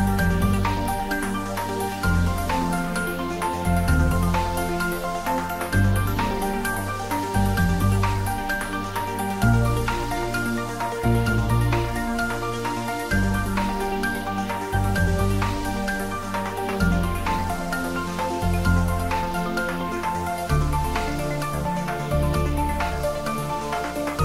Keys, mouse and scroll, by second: 3.9 click, 5.1-6.1 scroll down 1, 7.4 Tab, 7.9-8.9 scroll down 1, 8.9 click, 9.8-10.4 middle drag, 11.4 scroll up 1, 13.0-13.9 middle click, 14.1-14.8 middle click, 15.1 scroll down 1, 17.9-18.6 scroll down 1, 18.9-19.9 middle drag, 22.5-23.0 typing.